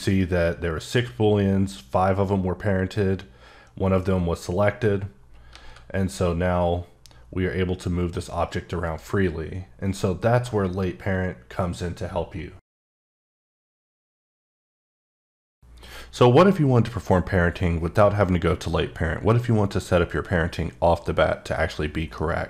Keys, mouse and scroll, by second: 5.1-5.5 scroll down 3, 5.5 g, 8.8 right click.